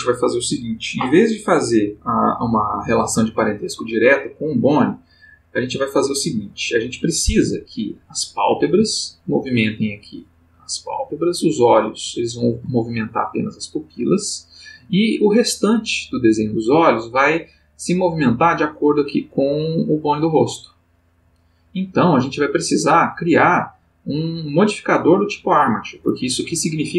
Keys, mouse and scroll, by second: 7.6 click, 8.6 g, 9.4 Escape, 11.5 click, 12.0 g, 12.4 Escape, 20.0 click, 21.2 click, 22.5 click.